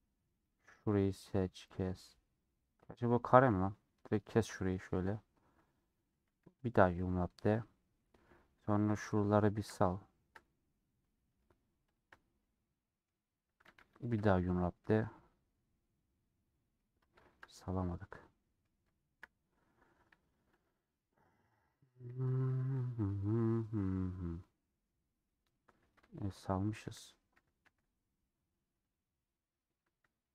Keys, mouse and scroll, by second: 0.5 click, 1.7-3.9 middle drag, 3.9 alt+click, 4.6 middle click, 4.9-5.4 scroll up 3, 5.5 middle click, 6.2 a, 7.4-7.9 scroll down 4, 7.9 middle click, 8.5 2, 8.6 click, 9.0-10.6 middle drag, 10.6 alt+click, 11.0 middle click, 12.0 alt+shift+click, 12.3 middle click, 13.6 a, 16.1-17.5 middle drag, 17.5 scroll up 2, 17.7 middle click, 18.6-18.9 scroll down 1, 18.9-20.0 shift+middle drag, 20.0 1, 21.2 click, 21.8 KP_Decimal, 22.4 scroll down 2, 22.6 middle click, 23.0-23.9 scroll down 9, 24.3-25.4 middle drag, 25.4 2, 25.6-26.0 scroll down 1, 27.4 3, 27.7 a, 29.0 click.